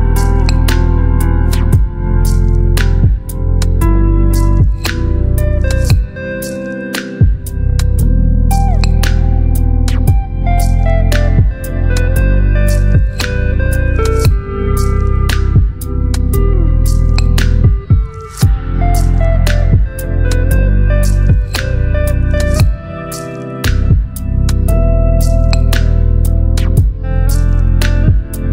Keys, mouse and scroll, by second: 2.9 shift+click, 6.8 click, 9.7 g, 11.5 ctrl+click, 18.5 shift+r, 19.0 e, 20.6-23.0 typing, 24.0 Return.